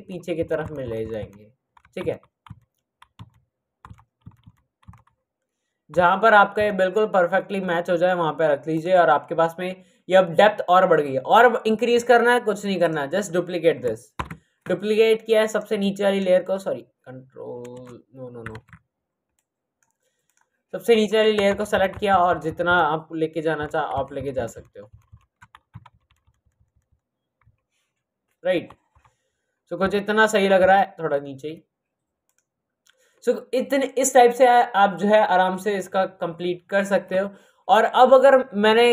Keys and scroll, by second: 0.5 Left, 1.1 Left, 3.1 Left, 4.1 Right, 4.8 Right, 5.9 Up, 6.5 Left, 14.1 ctrl+j, 17.8 Return, 18.4 z, 21.4 shift+Left, 22.0 Left, 22.6 Left, 23.5 shift+Up, 23.8 Left, 24.1 Left, 24.3 Left, 24.4 Left, 25.0 Left, 25.6 Left, 26.0 Right, 26.6 Right, 28.8 Up, 30.5 Down.